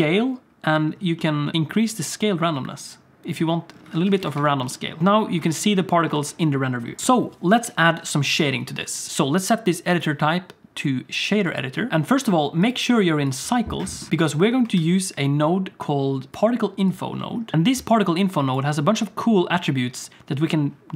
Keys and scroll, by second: 4.0 alt+a, 4.2 ctrl+s, 5.0 space, 5.5 alt+shift+z, 6.2 alt+shift+z, 7.0 alt+a, 7.0 ctrl+s, 14.8 shift+a.